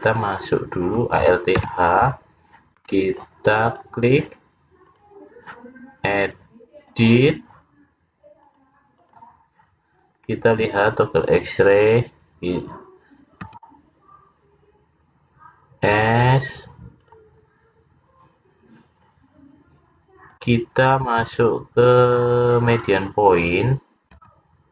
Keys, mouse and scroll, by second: 1.7 alt+h, 3.8 click, 4.8 click, 5.0 click, 7.0 click, 8.6 click, 10.2-11.6 scroll up 2, 11.6-12.0 scroll up 1, 13.6 s, 17.4-17.8 scroll down 3, 20.4 click, 24.2 s.